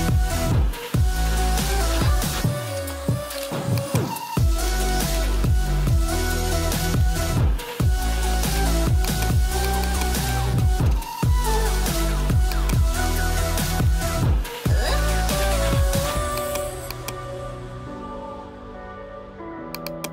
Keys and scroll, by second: 15.1 ctrl+j.